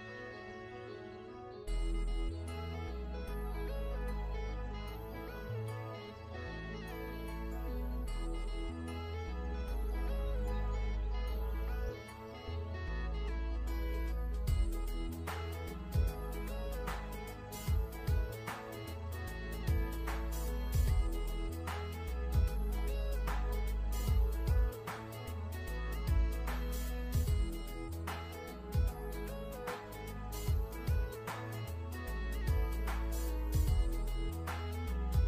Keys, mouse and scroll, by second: 8.7 click, 9.6 click, 10.9 click, 15.8 shift+scroll up 1, 16.4 scroll down 1, 16.7-17.6 scroll up 1, 17.6 click, 18.0 shift+click, 18.3 v, 20.1 alt+shift+scroll up 2, 21.2 click, 23.7 click, 24.6 KP_3, 25.2 KP_Enter, 25.3 click, 30.2 ctrl+d, 30.5 ctrl+d, 30.7 ctrl+d, 30.9 ctrl+d, 31.3 click, 33.5 alt+shift+scroll down 1, 34.1 ctrl+scroll up 1, 34.6 click, 35.2 ctrl+g.